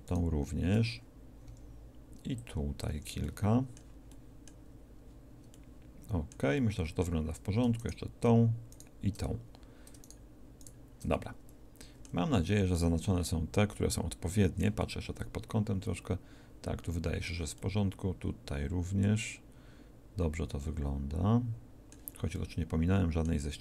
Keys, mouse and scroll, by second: 1.5 c, 7.8-11.9 right drag, 12.3 z, 15.0 middle click, 15.2 middle click, 16.4 middle click, 17.8 middle click, 20.0-21.6 middle drag.